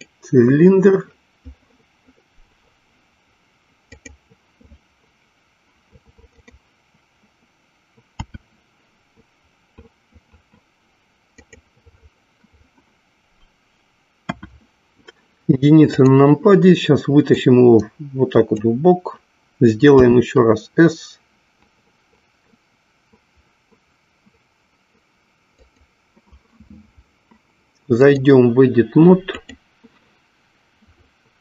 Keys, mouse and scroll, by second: 3.9 click, 6.4 click, 8.1 s, 11.6 click, 14.2 KP_1, 15.9 click, 17.1-18.8 drag, 20.1 s, 28.0-29.6 drag.